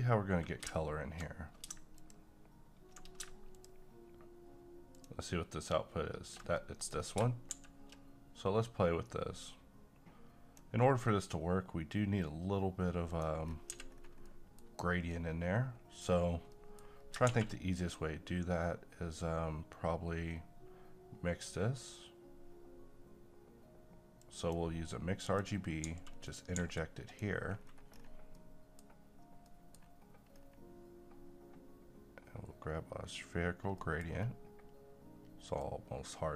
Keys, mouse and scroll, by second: 2.0 shift+click, 6.6 shift+middle click, 7.0 scroll up 1, 7.5 a, 9.4-13.1 drag, 13.6-14.0 scroll down 2, 13.7 x, 14.2-16.1 middle drag, 16.1 scroll up 1, 16.5 middle click, 17.0 scroll up 1, 17.3 shift+a, 24.2 click, 25.8 g, 26.3 click, 26.6 g, 27.1 click, 27.6 scroll down 1, 28.2 scroll up 1, 28.3 scroll down 1, 28.4 middle click, 29.0-29.5 scroll up 1, 29.5 middle click, 30.4-32.0 scroll up 1, 33.8 middle click, 34.0-35.6 scroll up 1, 35.6-36.3 drag.